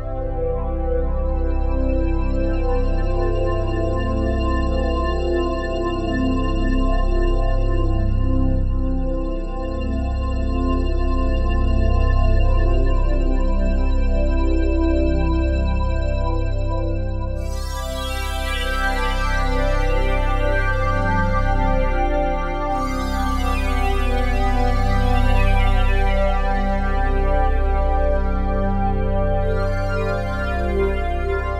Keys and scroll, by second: 0.5 s, 12.1 ctrl+z, 20.4 f.